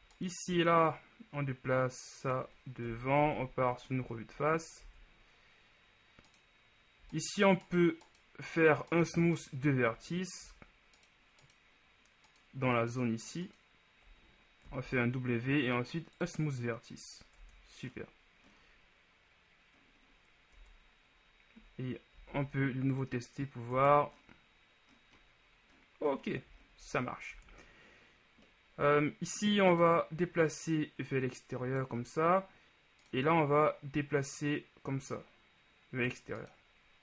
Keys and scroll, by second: 3.1 KP_1, 3.4 Tab, 4.9 shift+Tab, 14.8 shift+w, 17.6 Tab, 20.7 Tab, 27.5 shift+Tab.